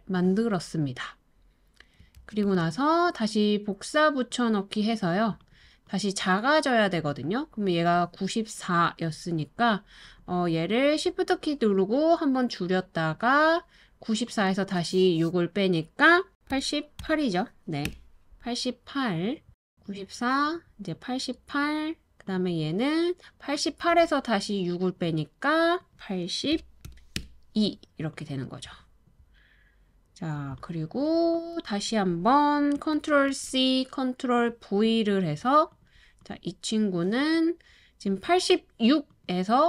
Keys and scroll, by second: 2.2 super+c, 2.4 super+v, 16.1-16.9 typing, 17.5 Return, 26.5 8, 26.8 2, 27.2 Return, 32.9 super+c, 33.3 super+v.